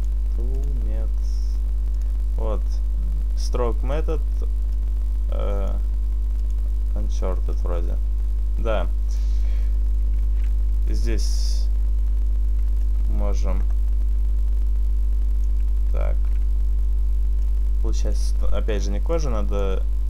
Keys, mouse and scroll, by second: 1.4 click, 2.4 click, 7.8 click, 10.3 ctrl+z, 12.9 click, 16.2 ctrl+z, 17.5 click.